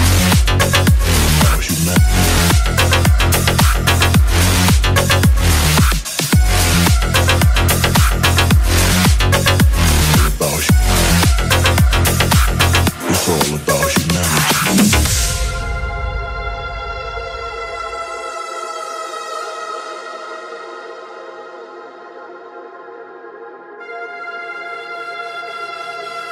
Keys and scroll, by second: 1.6-2.5 typing, 14.1-14.9 typing, 16.7 space, 19.5 shift+/, 20.5 Home, 21.0 space.